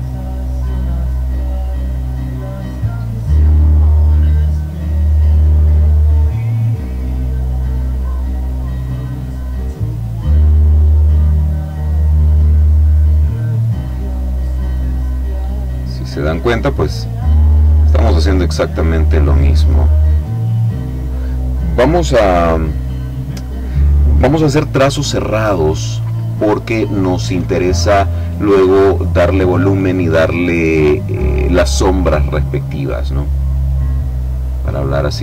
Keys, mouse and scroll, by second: 0.5 click, 2.9 click, 4.7 click, 8.2 click, 9.4 click, 10.6 click, 13.1 click, 14.5 click, 15.4 click, 16.9 click, 18.9 click, 20.2 click, 34.7-35.2 drag.